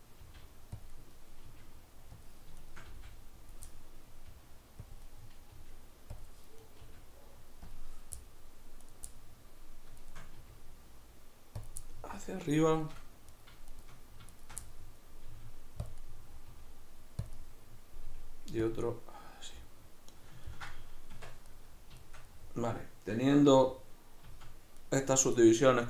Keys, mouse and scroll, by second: 0.2 g, 0.9 click, 1.0-2.3 middle drag, 1.5 g, 2.3 click, 2.6 shift+right click, 2.9 g, 3.6 click, 3.7-4.9 middle drag, 4.3 g, 4.9 click, 5.1-6.2 middle drag, 5.5 g, 6.2 click, 6.6 right click, 6.8 g, 7.7 click, 8.2-8.9 middle drag, 8.9 right click, 9.1-10.0 middle drag, 10.0 shift+right click, 10.3 g, 11.7 click, 11.8-13.3 middle drag, 13.3 right click, 13.7 shift+right click, 14.4 shift+right click, 14.6-15.3 middle drag, 15.3 g, 15.9 click, 16.0 middle click, 16.5 g, 17.4 middle click, 18.1 g, 18.8 click, 18.8-25.8 middle drag, 21.2 Tab, 24.3 z.